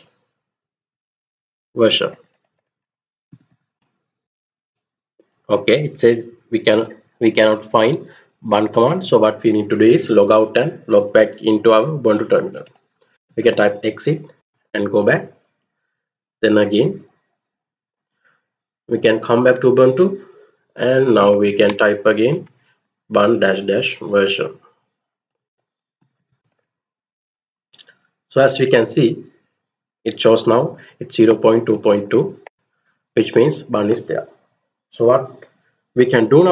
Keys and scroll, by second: 0.6-4.0 typing, 12.1-13.9 typing, 14.1 Return, 20.5-23.6 typing, 24.7-26.6 typing, 26.8 Return.